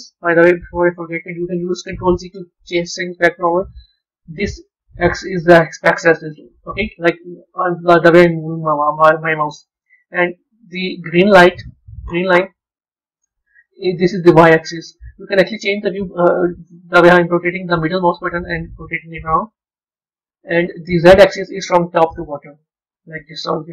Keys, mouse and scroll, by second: 0.8 ctrl+z, 3.6 KP_1, 9.5-12.4 middle drag, 16.5-19.5 middle drag, 21.8 KP_1.